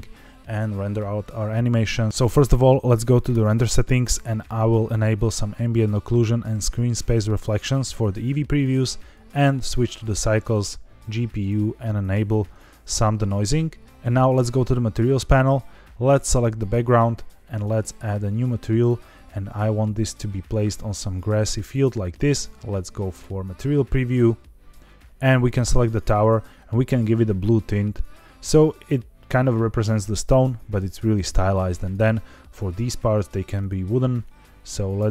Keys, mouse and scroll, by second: 2.1 click, 3.2 click, 4.8 click, 6.9 click, 8.4-9.2 drag, 9.8-10.7 drag, 11.3 click, 12.2 click, 13.8 scroll up 2, 14.8 click, 16.2 click, 17.4 click, 19.1 click, 23.6 click, 24.8 scroll down 2, 25.0 scroll up 2, 25.4 click, 26.1 click, 31.7 click, 32.6 click, 33.5 click.